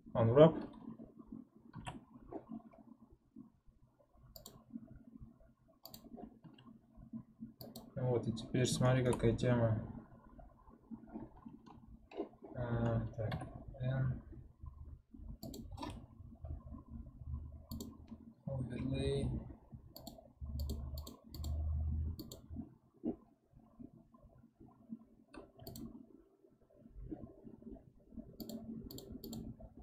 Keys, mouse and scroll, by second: 1.7 a, 6.4 s, 13.4 n, 25.7 click.